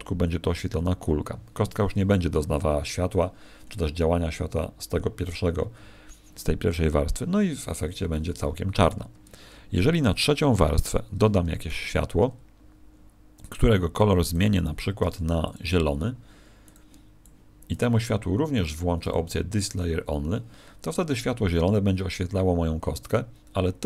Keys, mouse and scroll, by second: 8.9 Escape, 10.7 click, 11.5 shift+a, 14.9 g, 15.5 click, 16.9 click, 18.9 click.